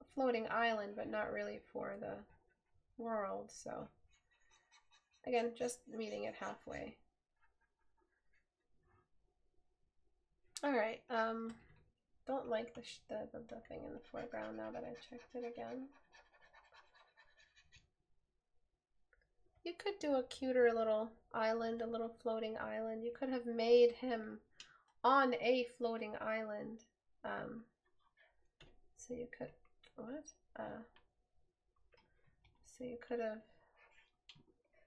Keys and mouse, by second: 11.9 right click.